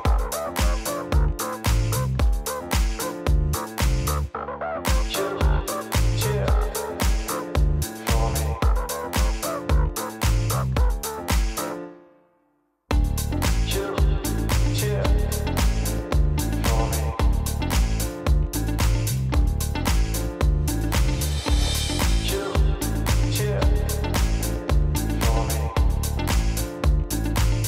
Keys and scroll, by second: 1.5 space, 7.6 space, 11.7 space, 17.3 space.